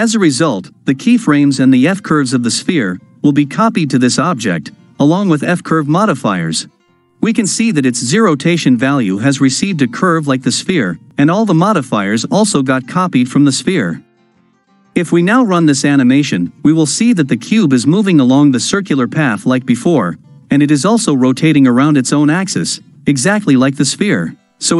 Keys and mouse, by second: 15.8 shift+Left, 16.2 space.